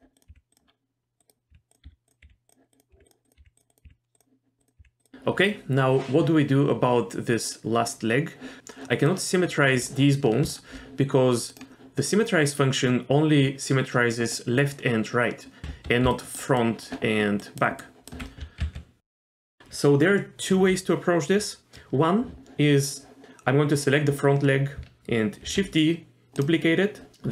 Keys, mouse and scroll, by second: 0.2 click, 0.3 g, 0.7-1.2 scroll down 1, 1.2 click, 1.5-4.8 typing, 2.7 click, 3.2 click, 3.7 click, 4.6 click, 9.1 click, 10.5 shift+click, 11.5-14.1 right drag, 15.6 ctrl+z, 15.6 click, 15.6-18.2 typing, 16.1 click, 16.6 click, 17.4 click, 17.8 click, 18.6 ctrl+z, 19.0 click, 25.4 shift+d.